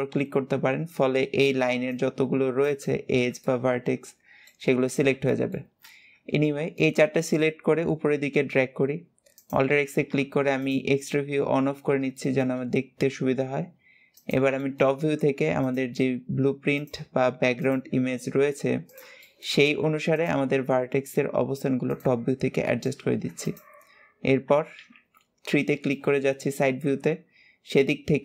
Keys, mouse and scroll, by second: 1.1 c, 2.7-3.3 scroll down 5, 3.3-4.6 shift+middle drag, 4.6-5.1 scroll up 4, 5.1 shift+middle click, 5.7-6.2 scroll up 1, 6.2 shift+middle click, 6.9-7.5 scroll up 1, 7.5 scroll up 1, 7.7 e, 9.5 alt+z, 10.4 click, 10.8-11.6 shift+scroll up 2, 11.6-12.0 scroll up 1, 12.0 shift+middle click, 12.4 scroll up 1, 12.9 g, 14.4 shift+middle click, 14.9-15.4 scroll up 2, 15.4 click, 15.7 g, 17.4 click, 17.7 g, 19.0 shift+middle click, 19.9 click, 20.2 g, 22.1-22.5 scroll down 4, 22.5 shift+middle click, 23.2 alt+shift+click, 24.5 KP_3, 25.4 scroll up 1, 25.7 shift+middle click, 26.4-27.5 scroll up 3, 27.5 click.